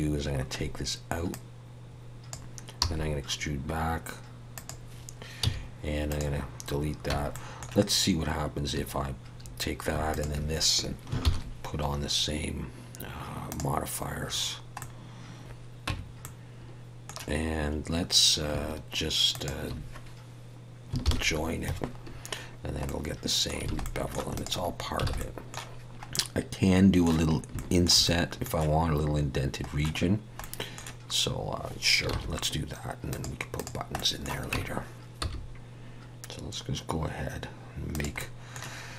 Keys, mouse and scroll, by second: 1.3 click, 2.8 e, 5.4 x, 7.1 Tab, 7.3 middle click, 10.1 shift+click, 11.2 ctrl+l, 14.8 middle click, 15.8 x, 15.9 Tab, 16.2 middle click, 19.3 shift+click, 21.1 ctrl+j, 22.0-22.8 scroll down 5, 22.8 middle click, 23.7 alt+a, 23.8 middle click, 24.3 click, 24.7-25.0 scroll down 2, 25.1 alt+a, 25.2 middle click, 26.1 middle click, 27.3 scroll up 1, 27.5 shift+middle click, 28.0 middle click, 32.1 shift+a, 33.9 middle click, 34.5 Tab, 38.1 middle click.